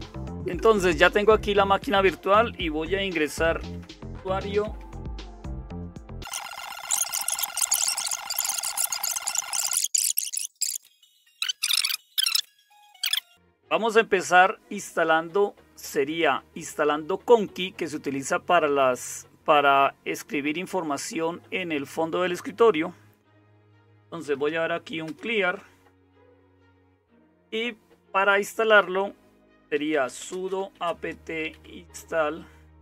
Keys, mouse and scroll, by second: 0.0-32.8 typing, 7.0 super+Return, 8.9 super+2, 9.1 super+3, 9.2 super+4, 9.6 super+4, 10.1 super+space, 13.2 super+1.